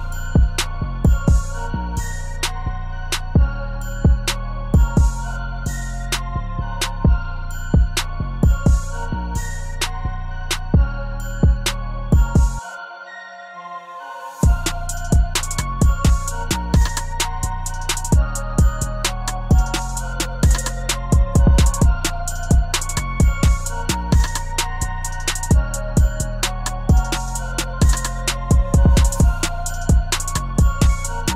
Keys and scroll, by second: 27.9 ctrl+z.